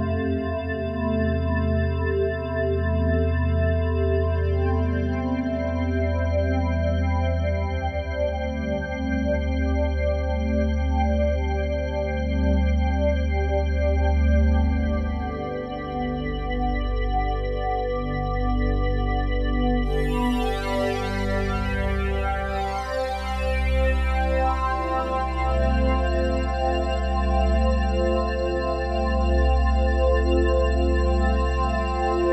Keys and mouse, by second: 0.1 click, 1.5 click, 1.7 click, 3.7 click, 3.9-5.5 drag, 6.9 click, 7.5 click, 9.6-10.2 typing, 11.4 typing, 13.4 click, 18.6 click, 20.0 click, 22.0 click, 24.2 click, 25.7 click, 26.0 click, 27.2 click, 30.2 click, 31.9 click.